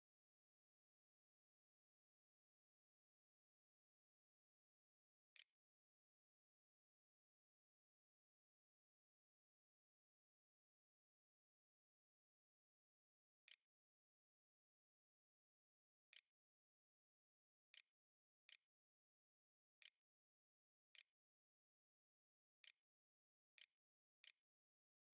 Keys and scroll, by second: 4.8 BackSpace, 6.0 =, 13.0-16.1 typing, 18.3 o, 19.6 a, 20.7-25.1 typing.